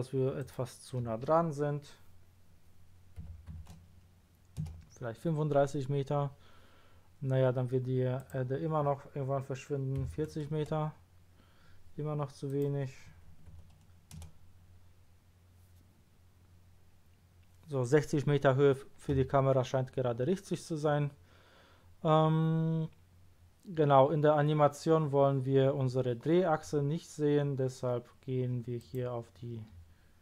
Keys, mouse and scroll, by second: 0.4 click, 3.2 KP_3, 3.5 KP_5, 4.6 Return, 8.1 click, 10.0 KP_4, 10.3 KP_0, 12.4 Return, 12.4 click, 13.3 KP_6, 13.5 KP_0, 14.2 Return, 20.4-21.6 scroll up 2, 21.8-22.3 scroll down 1, 28.8 click.